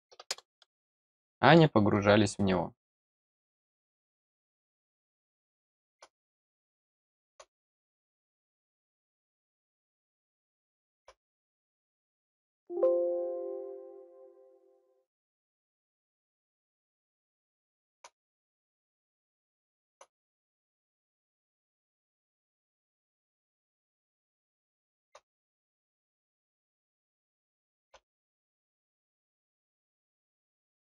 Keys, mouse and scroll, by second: 1.1 middle click, 1.9 scroll down 1, 2.9 click, 4.5 middle click, 5.4 middle click, 6.6 middle click, 9.0 click, 10.0 click, 10.5 middle click, 16.2 click, 17.2 middle click, 18.8-19.9 middle drag, 21.0 scroll up 1, 21.4 middle click, 22.3 click, 24.1 middle click, 25.4 middle click, 25.8-26.2 scroll down 2, 26.6-27.7 middle drag, 29.6 click.